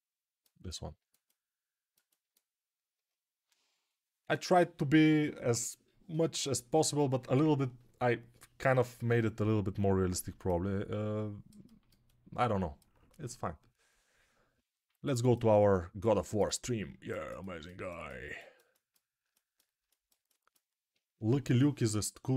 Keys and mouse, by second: 16.7-22.3 alt+drag.